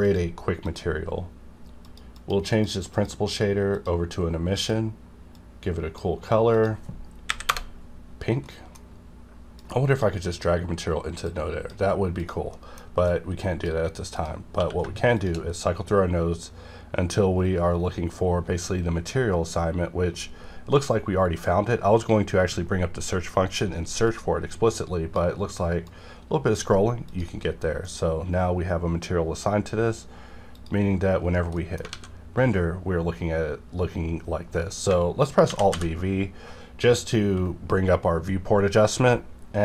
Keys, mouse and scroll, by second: 2.1 click, 2.5 click, 7.3 KP_6, 7.5 KP_Enter, 8.4 middle click, 9.6-12.2 drag, 12.5 middle click, 13.0 click, 14.5 q, 15.1 shift+click, 15.4 scroll up 1, 16.0 scroll up 1, 17.0 scroll up 1, 17.7 scroll up 1, 18.4 scroll up 1, 19.3 scroll down 1, 20.3 scroll up 1, 20.6 scroll down 1, 21.6-22.1 scroll down 1, 22.1 scroll up 1, 24.0-27.1 drag, 30.5 click, 31.6 middle click, 31.9 alt+a, 34.9 alt+a, 35.5 alt+v.